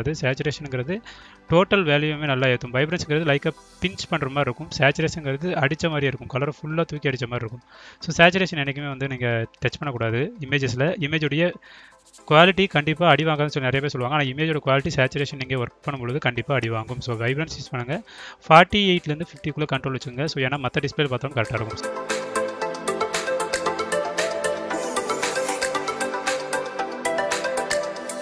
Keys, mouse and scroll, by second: 3.3-3.9 drag, 4.5-10.0 drag, 11.4 click, 12.4 click, 16.2-17.8 drag, 19.2-23.8 drag, 24.3-24.6 scroll up 1, 25.1-28.1 drag.